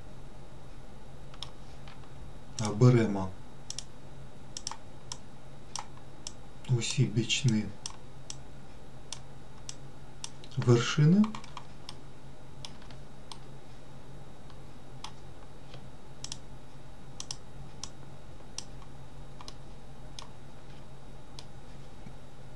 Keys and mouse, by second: 3.0 shift+click, 4.0 shift+click, 5.0 shift+click, 5.5 shift+click, 6.7 shift+click, 7.8 shift+click, 8.6 shift+click, 10.0 shift+click, 12.2 shift+middle click, 13.6-15.4 middle drag, 16.6 shift+click, 17.5 shift+click, 18.2 shift+click, 19.9 shift+middle click, 21.7 middle click.